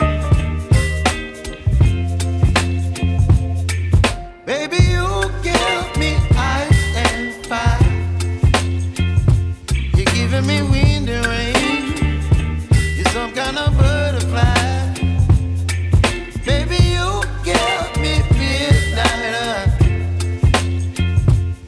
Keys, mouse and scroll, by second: 4.2 space, 4.3 click, 4.7 space, 5.5 click, 7.7 ctrl+0, 8.8 ctrl+shift+a, 13.3 click, 15.7 click, 15.7 typing, 20.3 typing, 20.4 click.